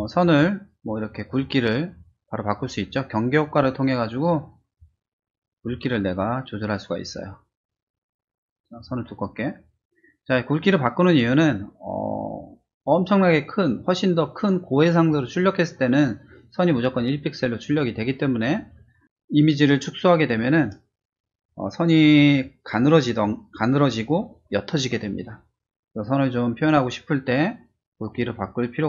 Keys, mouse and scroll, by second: 1.2 click, 4.7 click, 5.6-8.7 drag.